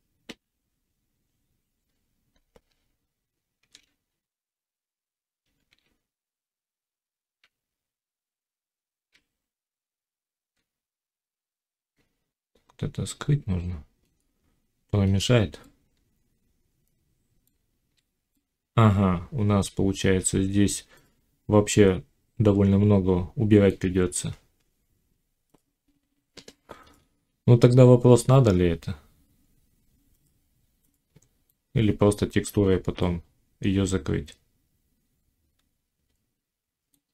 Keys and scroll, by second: 2.6 Tab, 4.0 z, 7.4 z, 9.7 Tab, 17.4 z.